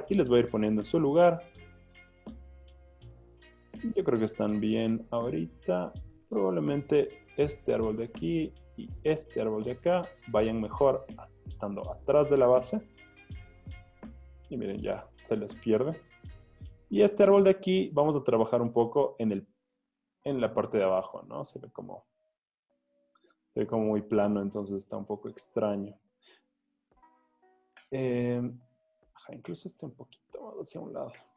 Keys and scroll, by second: 15.7 z, 16.7 v, 19.6 z, 20.9 z, 23.1 z, 24.7 v, 27.6 v.